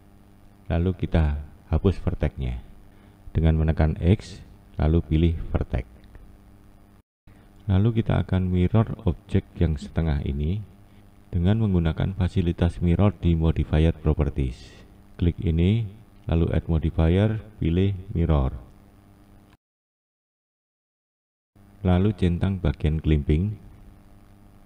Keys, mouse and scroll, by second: 9.0-9.8 scroll up 2, 9.8-11.0 scroll down 1, 18.1-19.2 drag, 19.2-19.8 scroll up 1, 19.8-21.7 scroll down 1, 21.7-24.2 scroll down 1, 24.2-24.6 drag.